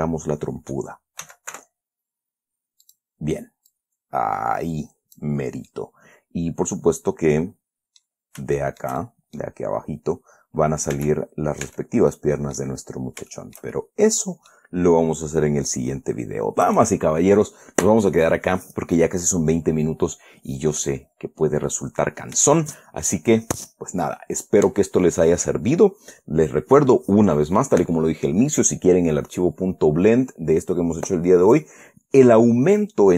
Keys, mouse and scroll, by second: 1.6 s, 1.9 y, 3.2 click, 4.1-5.7 drag, 6.0 middle click, 6.5 scroll down 2, 8.9-9.9 shift+middle drag, 11.3 Tab, 12.0 Tab, 12.5 click, 13.7-15.1 shift+middle drag.